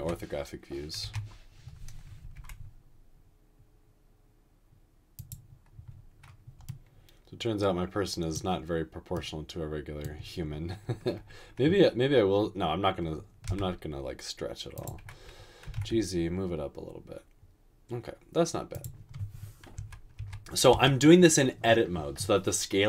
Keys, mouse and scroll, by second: 0.0-1.0 typing, 2.3 typing, 13.6 typing, 15.6 typing, 19.8-20.7 typing.